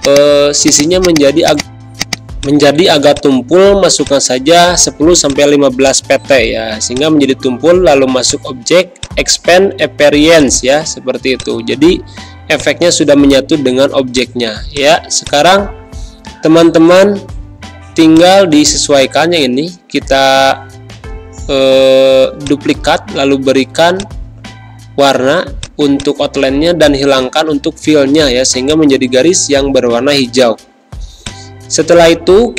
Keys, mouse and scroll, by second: 3.5 z, 3.9-5.6 drag, 5.6 space, 5.8 click, 6.1 space, 6.9 click, 10.9 z, 11.3 click, 12.9 space, 13.1 click, 16.2 ctrl+c, 18.0-21.5 drag, 22.4 click, 22.4 click, 26.5 space, 26.7 click, 27.0 space, 28.6-32.5 drag.